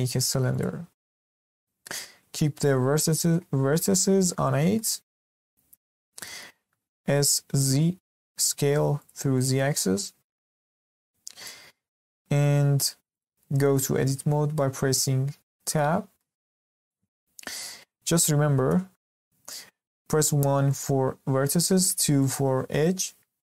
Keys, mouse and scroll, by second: 1.4-4.4 middle drag, 4.7-6.0 middle drag, 6.0 scroll up 1, 6.2-7.0 shift+middle drag, 7.0 s, 9.3-10.4 middle drag, 10.4-10.8 scroll up 1, 10.8-12.1 middle drag, 12.1 s, 13.3-15.6 middle drag, 15.6 Tab, 16.1-23.5 middle drag.